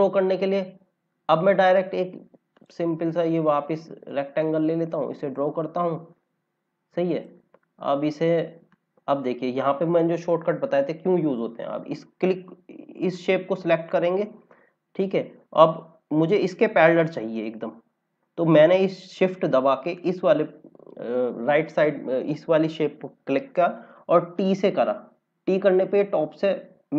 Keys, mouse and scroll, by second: 2.5 click, 4.6 click, 7.6-8.1 scroll up 2, 8.6 click, 13.0 click, 15.6 scroll down 1, 19.9 click, 24.3 t.